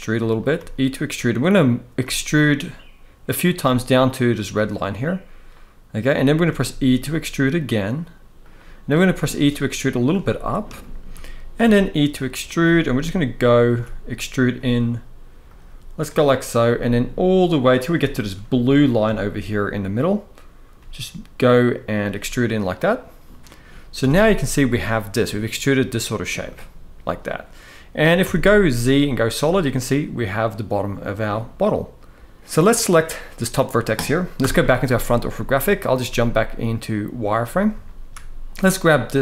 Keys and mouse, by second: 0.1 click, 0.2 e, 0.8 click, 1.7 e, 3.1 click, 3.3 e, 4.4 click, 6.2 e, 8.1 click, 8.7 e, 9.7 click, 10.5 shift+middle click, 11.2 e, 12.1 click, 12.3 e, 13.1 click, 13.4 e, 14.3 e, 15.1 click, 16.4 e, 17.5 click, 17.8 shift+middle click, 18.8 shift+middle click, 20.5 g, 21.7 click, 23.7 a, 26.2 middle click, 27.9 z, 29.1-32.3 middle drag, 32.4 middle click, 33.1 click, 34.1 KP_1, 35.2 shift+middle click, 35.7 z, 37.5 shift+middle click, 38.4 click, 39.0-39.2 shift+middle drag.